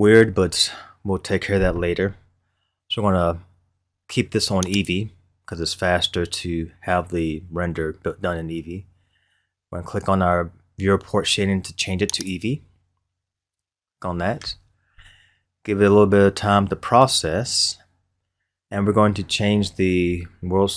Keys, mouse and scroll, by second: 4.7 click, 13.2 click.